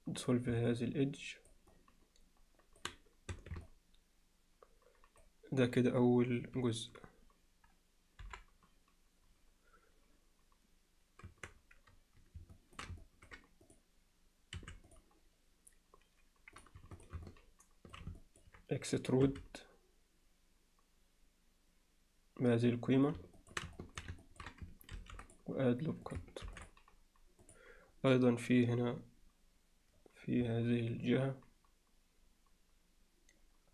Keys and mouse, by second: 0.7 middle click, 1.7-2.8 alt+middle drag, 3.3 Tab, 3.7-5.2 alt+middle drag, 8.2 KP_7, 11.3 Tab, 12.6 middle click, 13.0 ctrl+middle click, 13.7 click, 14.6 3, 17.3 alt+middle click, 18.2 ctrl+middle click, 19.3 e, 23.4 alt+middle click, 23.8 alt+middle click, 24.2 ctrl+alt+middle click, 24.9 ctrl+r, 31.1-33.7 alt+middle drag.